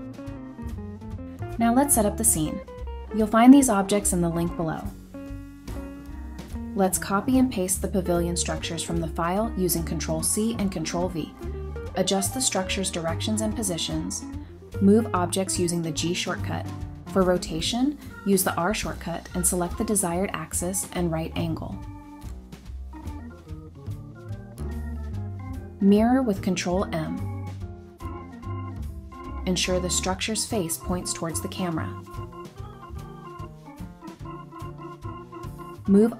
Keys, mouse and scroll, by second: 1.9 scroll up 1, 7.1 shift+click, 8.4 ctrl+c, 9.2-9.7 scroll down 1, 9.7 middle click, 10.6 scroll down 1, 10.7 typing, 11.6-12.0 scroll up 1, 12.0 typing, 13.7 middle click, 14.9 typing, 16.2-16.6 scroll up 1, 16.8 Return, 17.3 middle click, 18.5-19.1 scroll up 1, 19.1 middle click, 25.6 ctrl+m, 29.3 scroll down 1, 30.7 shift+click, 30.9 shift+double click, 32.2 g, 32.4 y, 34.0 typing, 35.1 double click, 35.4 scroll up 1, 35.6-36.1 scroll down 1.